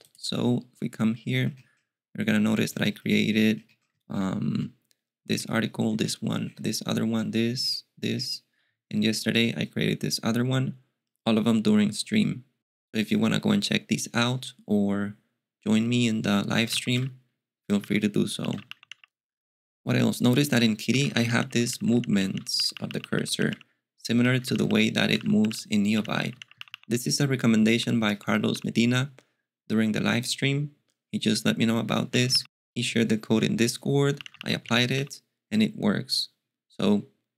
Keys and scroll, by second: 16.2-29.0 typing, 17.8 alt+x, 31.8-32.8 typing, 33.9-35.1 typing.